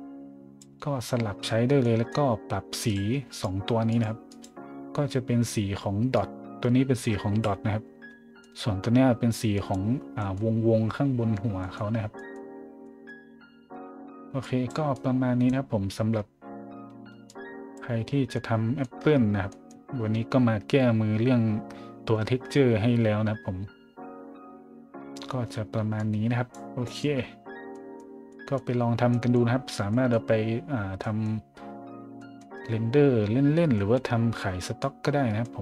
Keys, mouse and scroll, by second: 1.8 middle click, 2.8 click, 3.3 click, 3.9 click, 4.2 click, 6.1-7.4 drag, 8.4 middle click, 8.8 middle click, 9.5 click, 10.2 middle drag, 11.6 middle drag, 11.9 middle click, 12.1 middle drag, 12.8 middle drag, 13.3 middle click, 14.4 click, 14.9 click, 16.1 scroll down 1, 17.2 click, 18.0 scroll down 1, 18.3-19.1 scroll up 2, 18.7 middle click, 19.5 middle click, 26.0 click, 26.8 middle drag, 27.1 middle click, 27.7 middle drag, 28.3 middle drag, 29.1 middle drag, 29.9 middle drag, 31.0 middle click, 32.2 middle click, 33.7 middle drag, 34.6 middle drag, 35.1 middle click, 35.4 middle click.